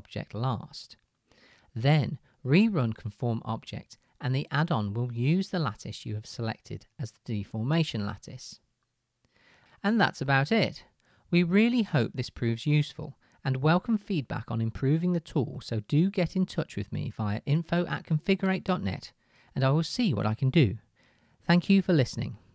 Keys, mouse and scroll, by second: 3.5-21.4 middle drag, 21.4 click.